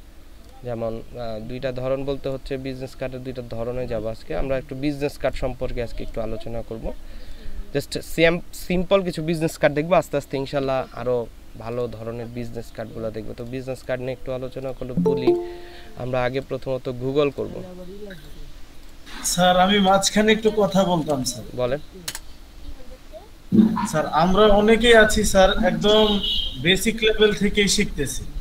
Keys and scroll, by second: 20.9 typing, 22.0 Return.